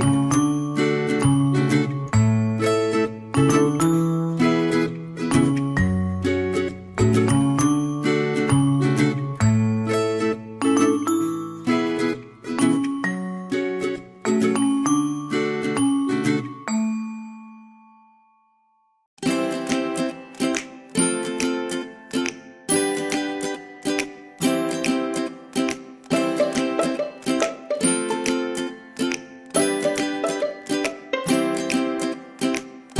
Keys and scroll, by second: 14.8 o.